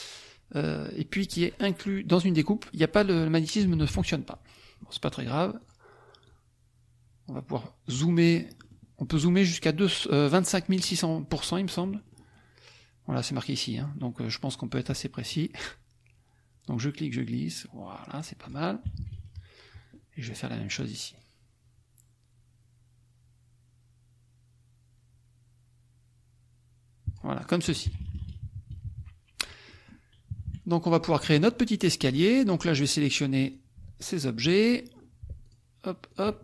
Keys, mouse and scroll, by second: 3.6 KP_Subtract, 4.5 click, 5.6 click, 6.3-8.8 drag, 10.4 click, 11.4 middle click, 14.7 click, 15.3-18.3 drag, 18.4 click, 18.9 -, 19.9 middle click, 20.6 click, 21.2-27.5 drag, 27.8 KP_Subtract, 29.6 click, 30.3 KP_Subtract, 30.9 click, 31.0 middle click, 31.8 click, 33.4 click, 33.9 shift+click, 34.8 shift+middle click, 35.4 shift+click, 36.1 shift+click.